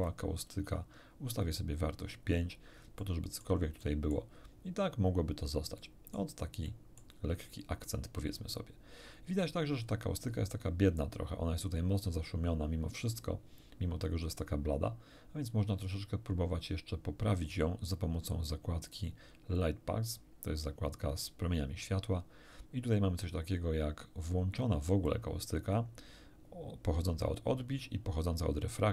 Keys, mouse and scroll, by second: 0.5 5, 1.3 click, 3.0 middle click, 3.8 middle click, 5.8 middle click, 6.7 middle click, 9.7-10.1 scroll up 1, 10.3 scroll up 1, 15.7-16.7 scroll down 5, 19.5 click, 22.8-23.3 scroll down 2, 24.5 click, 25.1 click.